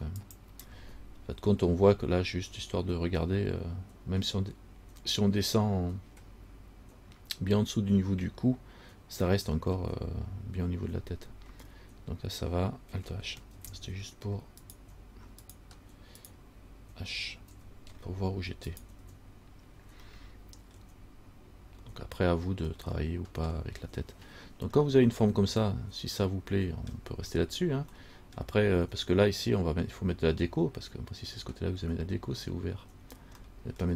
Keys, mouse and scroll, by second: 1.1-5.1 scroll up 7, 13.7 alt+h, 14.8 right click, 15.6 right click, 16.4 right click, 17.7 h, 18.1-18.9 scroll down 3, 18.9 right click, 19.2 h, 20.3 middle click, 20.9 scroll down 1, 21.6-22.8 scroll up 2, 22.8 scroll up 1, 23.0 middle click, 25.0 middle click, 28.2 middle click, 33.6 middle click.